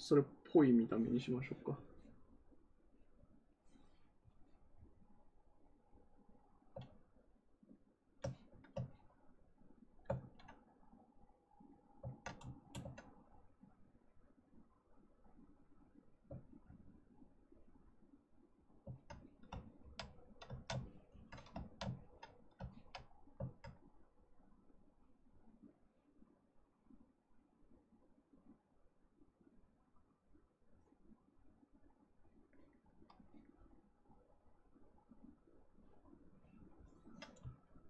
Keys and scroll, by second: 10.1 ctrl+z.